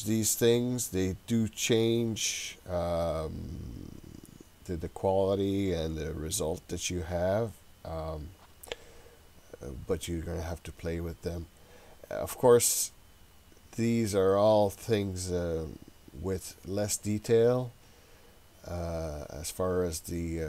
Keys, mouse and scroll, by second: 18.1-19.1 scroll up 3, 19.1-20.4 scroll down 2.